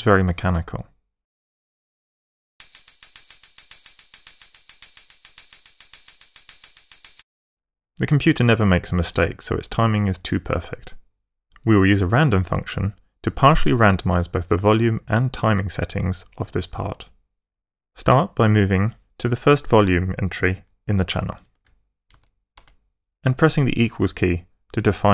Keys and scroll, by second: 1.5 alt+o, 2.5 alt+space, 7.1 space, 21.3 Page_Up, 22.1 Right.